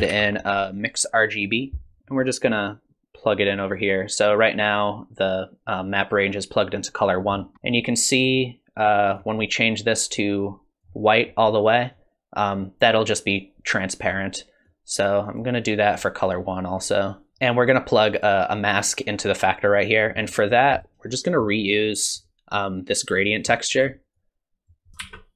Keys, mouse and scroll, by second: 3.3 click, 7.3-8.9 scroll up 5, 7.5 middle click, 9.1 click, 11.9 click, 14.6 click, 15.9 click, 17.3 click, 20.2-21.0 scroll down 10, 20.8 middle click, 23.3 middle click, 24.1 click, 25.0 shift+d.